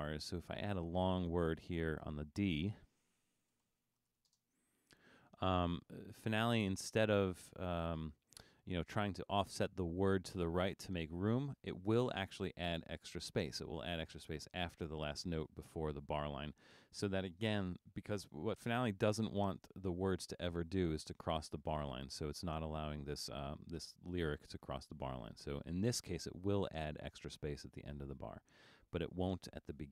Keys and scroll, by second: 3.3-4.7 typing, 27.4 super+z, 28.3 super+z.